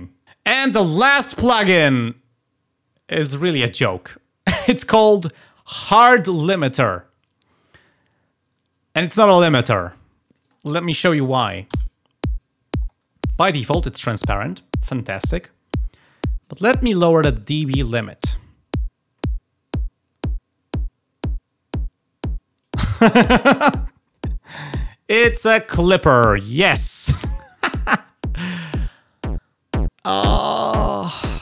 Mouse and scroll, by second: 10.4 click, 17.8-22.8 drag, 28.7-31.4 drag.